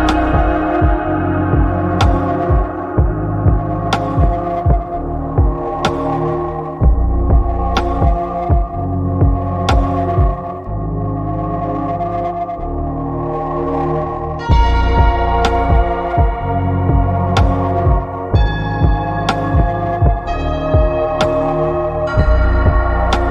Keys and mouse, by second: 0.1 click, 2.0 shift+middle click, 3.0-5.9 middle drag, 5.9 click, 6.7 click, 8.3 click, 8.6 click, 8.9 click, 11.0 shift+middle click, 12.1 shift+middle click, 14.1 click, 15.1 click, 15.6 click, 16.6 click, 18.9 click, 20.9 shift+middle click, 21.8 shift+middle click, 22.7 shift+middle click.